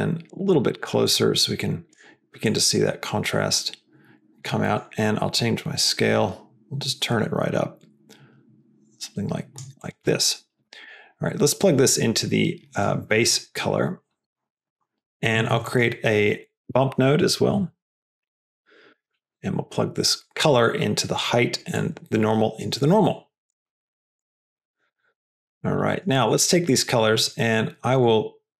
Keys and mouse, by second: 0.9-1.8 drag, 2.4-4.4 drag, 4.6 middle drag, 5.4-9.5 drag, 10.1 middle click, 10.7 middle click, 11.5-13.0 drag, 13.2 click, 13.9 middle click, 14.1 click, 14.4 click, 15.4 shift+a, 20.1-21.1 drag, 21.6-22.7 drag, 22.9 click, 23.9 click, 24.3 click, 24.8 click, 25.2 middle click, 25.8 middle click, 26.1 drag.